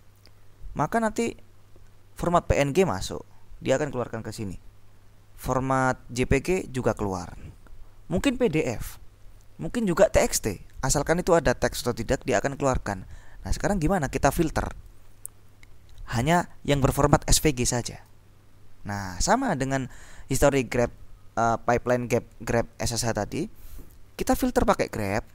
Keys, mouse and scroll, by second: 13.9 click.